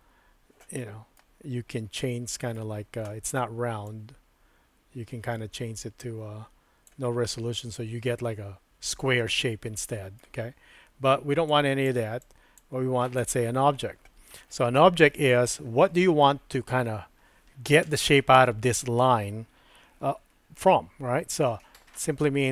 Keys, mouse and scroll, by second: 0.8 middle click, 2.0 middle click, 3.9-6.8 drag, 7.3-10.2 middle drag, 11.5 click, 12.2 click, 13.2 click, 15.1 middle click, 21.5 Tab.